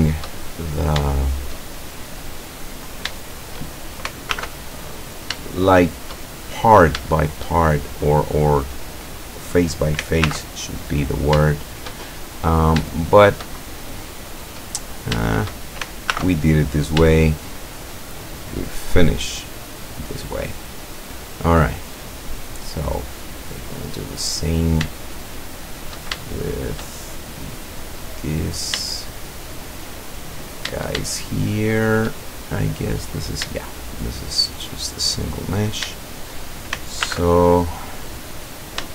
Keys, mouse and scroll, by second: 0.4-0.8 shift+scroll down 1, 1.1-1.7 shift+middle drag, 1.7-2.2 shift+scroll up 1, 2.9 shift+right click, 3.4 shift+right click, 4.3 alt+m, 5.0 click, 5.5-6.3 shift+middle drag, 6.8 right click, 7.2 shift+right click, 10.3 alt+m, 11.0 click, 11.5 shift+middle click, 11.9 shift+scroll up 1, 12.1-12.7 shift+scroll down 2, 13.0-13.6 shift+middle drag, 13.6-14.3 shift+scroll up 1, 15.0 shift+right click, 15.3 shift+right click, 16.1 alt+m, 16.7 alt+click, 17.1-18.0 shift+middle drag, 18.7 right click, 19.5-20.2 scroll down 2, 20.2 scroll down 1, 21.1 scroll down 2, 22.4-22.7 scroll down 2, 22.8-24.2 drag, 24.5-24.8 scroll up 2, 25.0-26.1 shift+drag, 26.3 shift+click, 27.1 shift+scroll up 2, 27.7 click, 28.1-28.7 scroll up 1, 28.9-30.1 shift+drag, 30.2 shift+scroll up 1, 31.2-31.7 shift+middle drag, 31.7 shift+scroll up 1, 31.9 shift+middle click, 32.2 shift+scroll up 1, 32.9 right click, 33.6-34.3 shift+middle drag, 34.5-35.2 shift+middle drag, 35.7 shift+right click, 36.1 shift+right click, 37.1 alt+m, 37.5 alt+click, 38.5 right click.